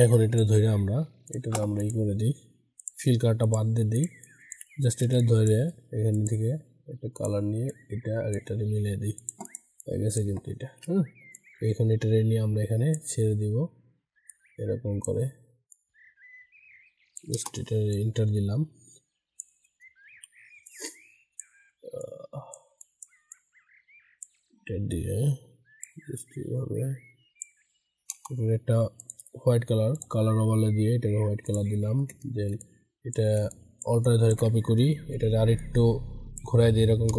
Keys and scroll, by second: 20.0 ctrl+t, 34.9 ctrl+t.